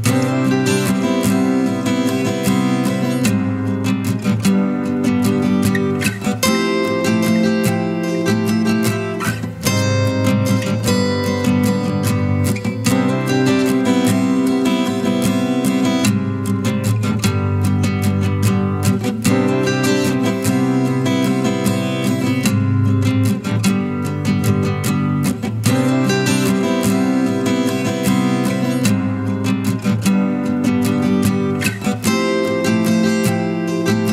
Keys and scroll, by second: 1.7 ctrl+KP_Add.